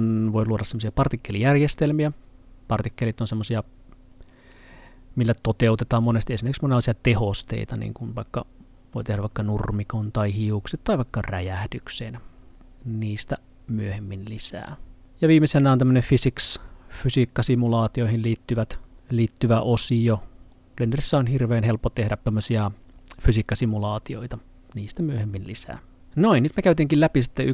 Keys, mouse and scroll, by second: 16.2 click.